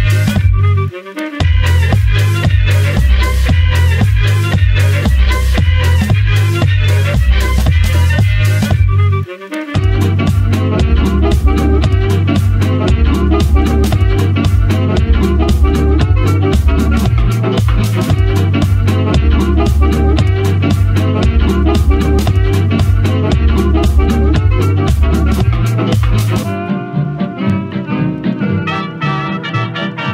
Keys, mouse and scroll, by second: 0.3 click, 0.6-2.1 middle drag, 2.1 `, 2.8 click, 6.6 click, 12.0-13.1 drag, 13.3 click, 15.6 click, 18.3 click, 19.5-21.2 shift+drag, 22.5 click, 23.1 click, 24.3 click, 24.7 click, 25.6 click, 26.0 scroll up 2, 27.7-28.5 scroll down 1, 28.5-29.2 scroll down 1, 29.2-30.1 shift+drag.